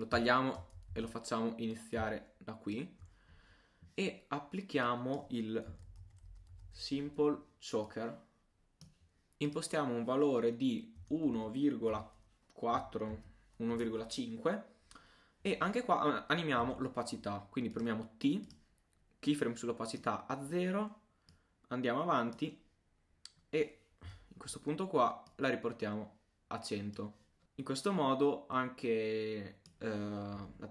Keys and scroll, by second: 0.9 shift+super+z, 1.7 super+z.